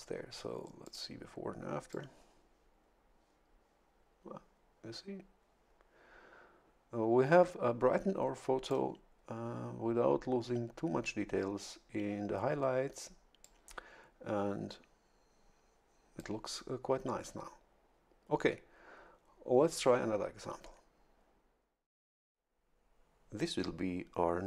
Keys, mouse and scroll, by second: 0.8 click, 1.9-9.0 drag, 13.4-16.5 drag.